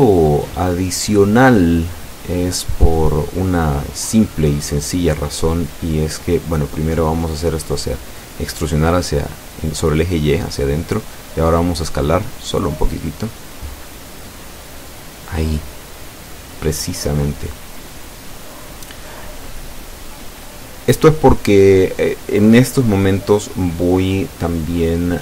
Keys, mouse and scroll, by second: 0.7 alt+shift+right click, 11.0 click, 11.8 click, 12.8 e, 13.4 y, 18.3 click, 18.8-20.2 middle drag, 20.7 s.